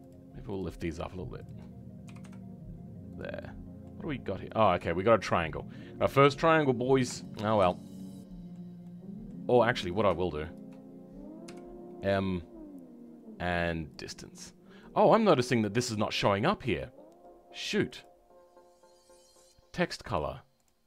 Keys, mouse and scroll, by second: 3.3 middle click, 7.9 middle click, 20.3 click.